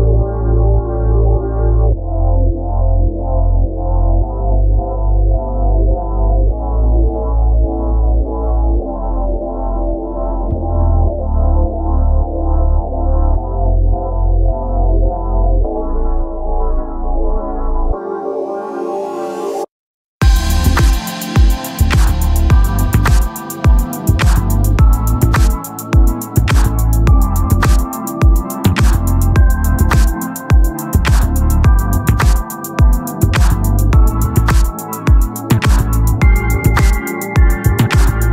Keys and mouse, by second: 5.1 click, 7.4 click, 11.7 ctrl+-, 17.6 click, 23.3 click, 27.3 click, 28.3 right click, 29.7 click.